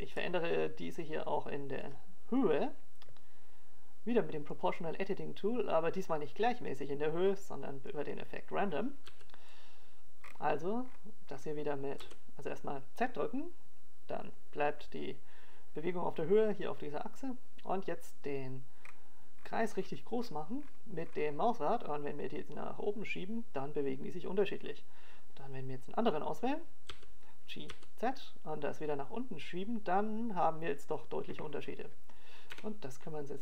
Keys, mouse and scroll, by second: 0.9 ctrl+KP_0, 3.8 KP_1, 4.8-5.4 scroll down 2, 5.6 middle click, 7.9 right click, 10.0 click, 12.1 click, 14.6 g, 30.2 click, 31.8 right click, 32.6 g.